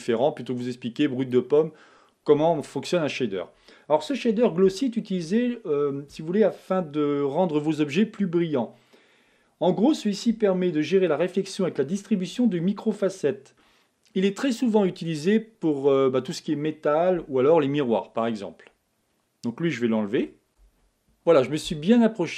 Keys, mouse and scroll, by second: 0.4 click, 20.3 x.